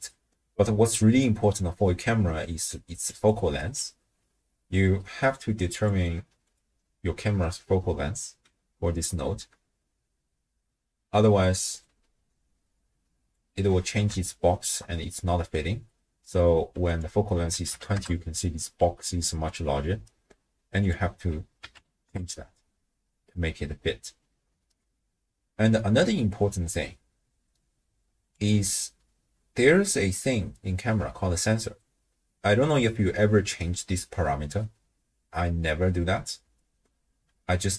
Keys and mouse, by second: 1.9-2.7 d, 2.7 click, 3.1 d, 3.2 d, 3.3 click, 3.3-4.1 d, 5.7 click, 6.4 click, 11.9-13.4 drag, 14.4-14.8 shift+drag, 16.9-18.0 drag, 20.8-22.1 drag, 28.4 click.